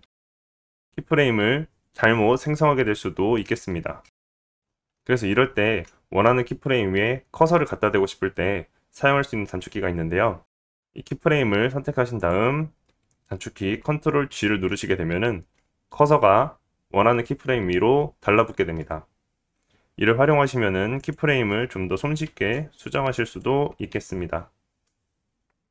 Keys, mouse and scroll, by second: 0.5-7.6 right drag, 0.5 middle click, 0.5-1.1 scroll up 3, 4.0-7.6 drag, 4.0 space, 5.7 x, 6.3-7.4 middle drag, 7.4-10.0 alt+scroll down 9, 7.5 middle click, 10.8 click, 10.8 middle click, 10.8 right click, 11.4-13.4 drag, 13.5-16.5 drag, 15.5 ctrl+g, 22.2 click, 22.2 right click, 23.4 ctrl+g, 24.5-25.7 drag, 24.5 right click, 25.1 ctrl+g.